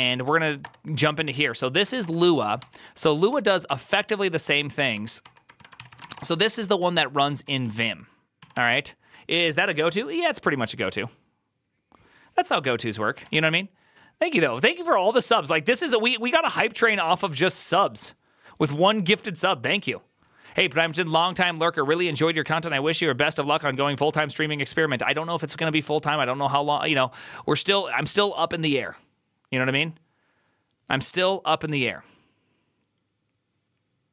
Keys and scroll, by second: 0.1 Down, 0.3 Down, 0.5 Return, 1.1 ctrl+c, 1.2 ctrl+c, 1.5-2.3 typing, 2.4 ctrl+d, 3.1 ctrl+d, 3.2 ctrl+d, 3.5 ctrl+d, 4.3 ctrl+d, 4.8 ctrl+d, 5.3 ctrl+d, 5.6 ctrl+c, 5.7-6.5 typing, 6.7 ctrl+u, 7.1 ctrl+u, 7.3 ctrl+u, 7.5 ctrl+u, 7.6 ctrl+u, 13.2 alt++.